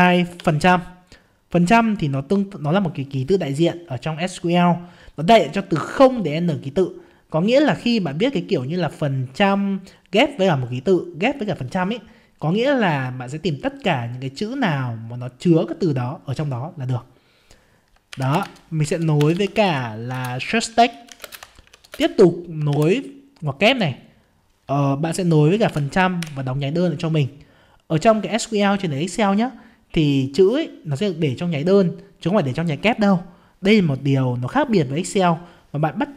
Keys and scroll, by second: 20.1 ctrl+space.